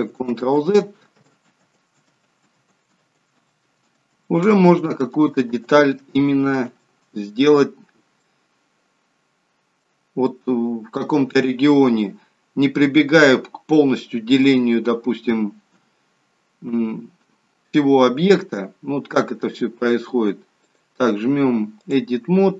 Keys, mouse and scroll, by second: 0.2 ctrl+z, 1.2 ctrl+z, 1.6 ctrl+z, 2.1 ctrl+z, 2.5 ctrl+z, 3.0 ctrl+z, 3.5 ctrl+z, 3.9 ctrl+z, 4.5 ctrl+z, 5.0 ctrl+z, 6.0 ctrl+z, 6.5 ctrl+z, 8.2 middle click, 15.7 KP_3, 16.7 KP_1, 20.6 click.